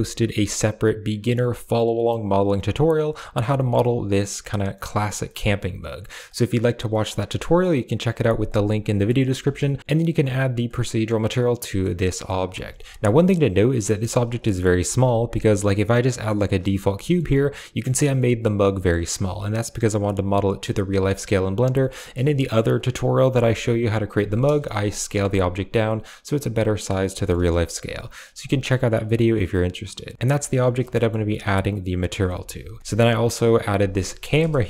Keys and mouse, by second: 2.4-3.3 middle drag, 3.5 shift+middle click, 3.7-4.1 middle drag, 4.6 middle click, 10.8-11.7 middle drag, 11.9 middle drag, 12.6 shift+middle click, 13.0 middle click, 14.4 middle click, 14.8 shift+a, 16.9 g, 16.9 middle click, 17.6 click, 18.1 middle drag, 18.6 g, 18.7 middle click, 19.0 click, 20.2-20.5 middle drag, 20.8 shift+middle click, 21.7 shift+middle click, 22.2 middle click, 23.2 typing, 23.9 drag, 24.7 KP_Decimal, 25.6-26.8 middle drag, 27.0 shift+middle click, 28.9 middle click, 30.3 click, 30.8 middle click, 32.2 alt+h, 32.7 middle click, 32.9 a, 34.3 KP_0.